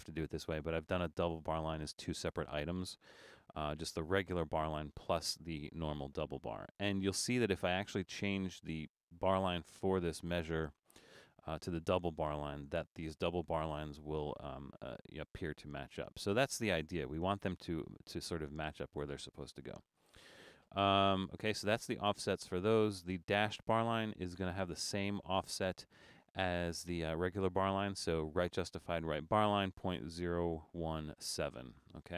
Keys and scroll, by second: 15.6 super+z, 19.5 BackSpace.